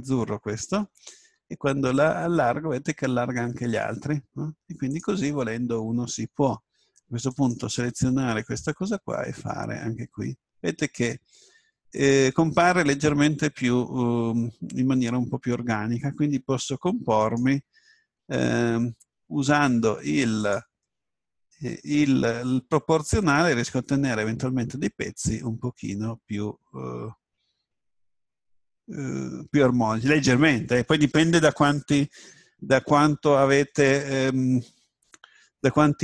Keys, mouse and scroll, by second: 1.2 s, 4.9-6.9 drag, 7.3 right click, 8.7 s, 12.6-14.0 drag, 15.2-17.2 middle drag, 17.2 right click, 18.2 s, 19.1 middle click, 20.5-22.9 drag, 20.9-22.9 middle drag, 25.2-27.0 middle drag, 27.1 middle click.